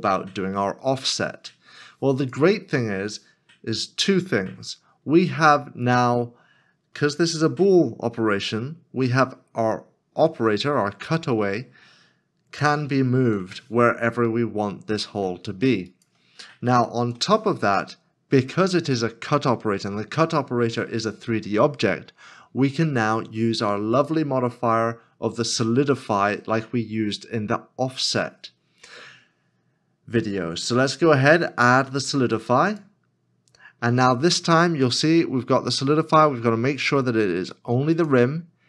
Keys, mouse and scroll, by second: 12.5 g, 17.0 ctrl+z, 21.9 scroll up 1.